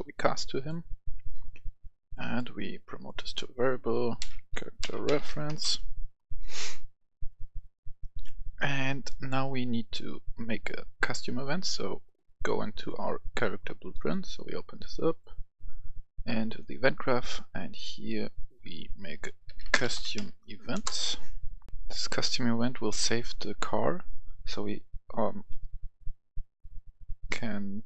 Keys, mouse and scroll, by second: 4.1-5.2 typing, 5.4 Return, 7.0-8.4 drag, 9.0 right click, 10.7 click, 14.8 right click, 16.4 click, 16.9 right click, 17.5 scroll up 1, 18.3 right click, 19.1-20.0 typing, 20.6 Return, 21.6 click, 22.0 F10, 23.6 F2.